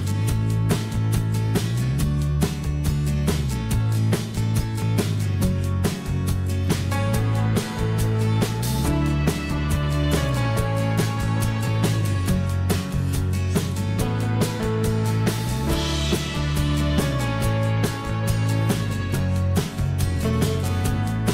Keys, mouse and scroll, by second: 1.9 m, 3.9 s, 10.4 o, 11.7 m, 16.7 s.